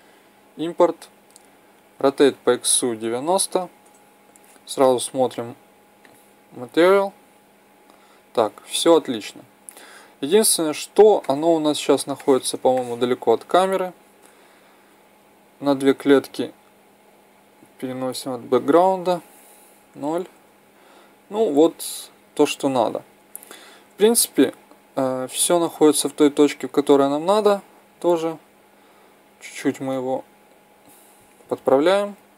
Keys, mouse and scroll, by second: 0.0-1.9 drag, 1.9 r, 5.3-7.2 drag, 11.2-14.4 middle drag, 14.5 KP_7, 19.6 KP_0, 24.1-26.1 drag, 27.1-29.0 drag, 31.6-32.3 drag.